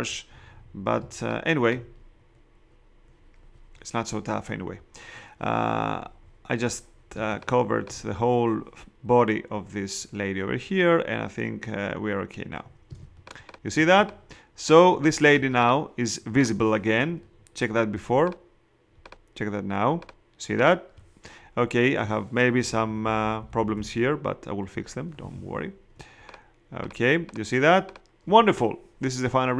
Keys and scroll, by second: 1.0 space, 7.1 space, 12.9 space, 22.7 ].